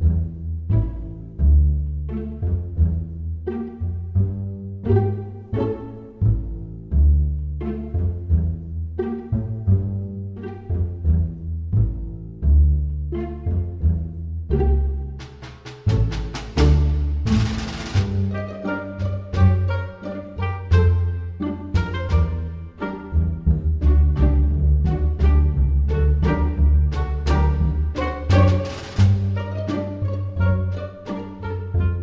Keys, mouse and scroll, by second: 1.1 middle click, 3.2 g, 5.8 middle click, 9.4 g, 15.4 middle click, 18.5 s, 24.3 s.